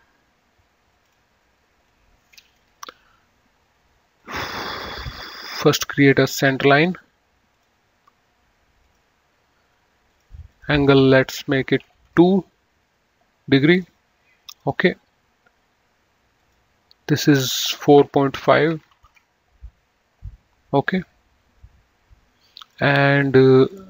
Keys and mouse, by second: 1.3 click, 1.8 Delete, 3.0 Escape, 4.5 click, 6.9 click, 12.1 KP_2, 12.4 KP_Enter, 14.0 click, 16.6 click, 18.7 KP_4, 18.9 KP_Decimal, 19.1 KP_5, 19.4 Return, 22.9 click.